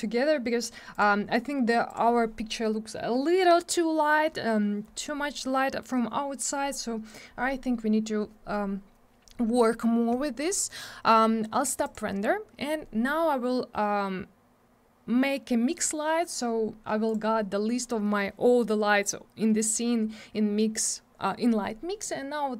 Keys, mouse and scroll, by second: 0.9 click, 1.0 click, 1.9 click, 1.9 click, 10.5 middle click, 11.8 click, 11.9 click, 17.1 click, 17.1 click.